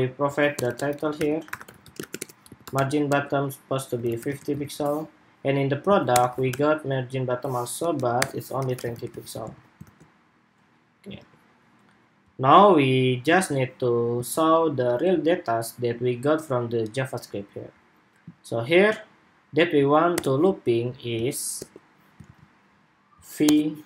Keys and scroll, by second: 4.3 super+s, 9.0 super+s, 9.3 super+Tab, 9.5 super+r, 10.9 super+Tab, 13.1 super+Tab, 13.9 super+Tab, 21.9 super+z.